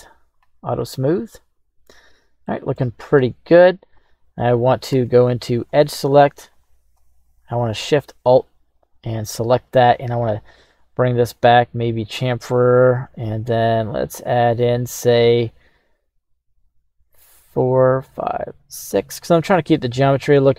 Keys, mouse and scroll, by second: 0.3 click, 0.8-2.8 middle drag, 3.1 Tab, 4.0 right click, 4.9 Tab, 5.6 right click, 6.3 alt+shift+right click, 6.5 alt+shift+right click, 10.1 ctrl+b, 12.2-12.9 scroll up 2, 16.1 scroll up 2, 18.0-18.5 scroll up 1, 18.5-20.5 scroll up 1.